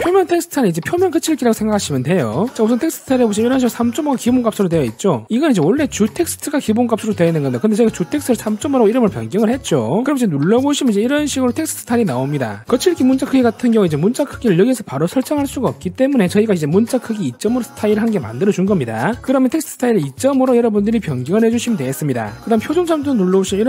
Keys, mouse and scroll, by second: 10.7 click, 21.1 click.